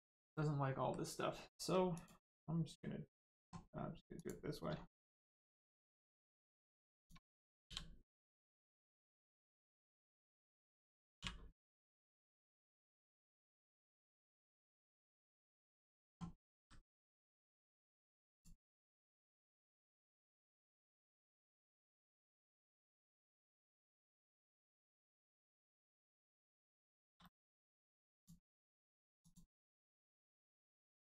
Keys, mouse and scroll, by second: 0.3 middle click, 1.9 click, 4.1 click, 4.6 scroll down 2, 4.8 shift+middle click, 5.8 middle click, 6.9 click, 9.0 right click, 13.7 click, 14.3 scroll down 1, 15.0 shift+middle click, 15.2 scroll up 1, 16.5 g, 17.4 click, 18.7 middle click, 19.7 shift+middle click, 20.4 middle click, 21.7 shift+middle click, 23.4 click, 23.9 click, 26.1 shift+middle click, 26.8 shift+middle click, 27.2 middle click, 28.1 click, 28.4 middle click, 29.2 click, 30.2-30.8 scroll down 1, 30.8 l.